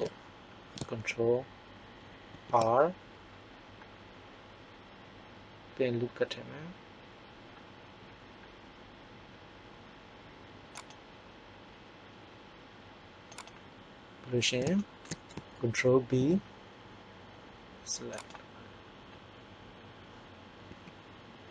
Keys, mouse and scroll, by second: 2.3 ctrl+r, 13.4-14.4 drag, 16.0 ctrl+b, 20.6 s.